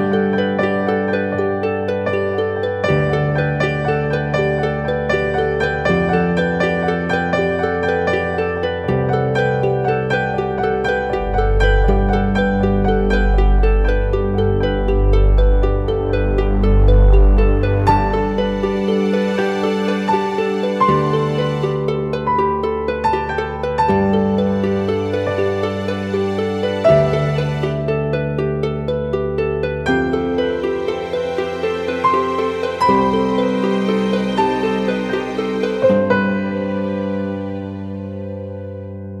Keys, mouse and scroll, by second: 19.9 ctrl+click, 29.2 ctrl+t, 31.5 alt+shift+click, 34.6 alt+shift+click, 36.9 alt+shift+click.